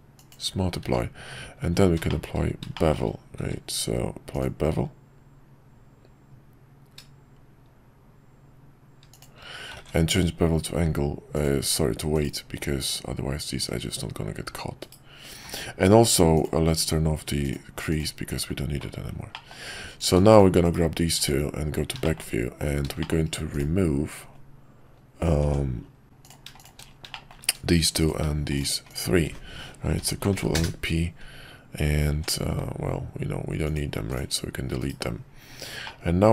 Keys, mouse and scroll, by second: 0.8 q, 2.1 middle click, 2.7 middle click, 9.7 ctrl+`, 15.5 ctrl+`, 19.3 middle click, 20.3 shift+click, 22.0 shift+middle click, 23.0 shift+middle drag, 25.4 Tab, 27.1 middle click, 30.0 ctrl+l, 30.3 p, 32.1 Tab, 33.9 x, 34.8 /, 35.8-36.3 middle drag.